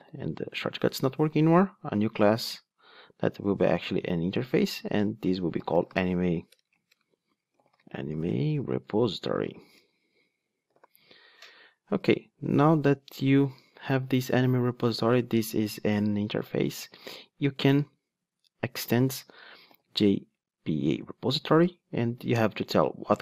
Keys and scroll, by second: 6.7 super+a, 10.6 super+BackSpace, 19.1 Return.